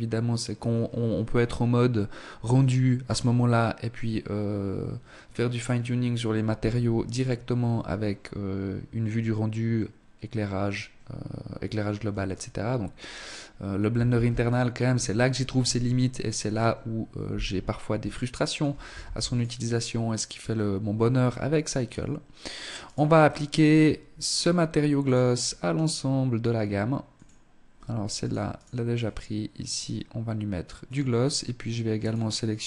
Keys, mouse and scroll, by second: 13.5 ctrl+s, 16.4 scroll up 1, 17.1 shift+middle click, 18.3 ctrl+s, 21.9 right click, 23.2 click, 24.8 right click, 26.1 click, 27.6 right click, 28.7 click, 31.0 right click, 32.2 click.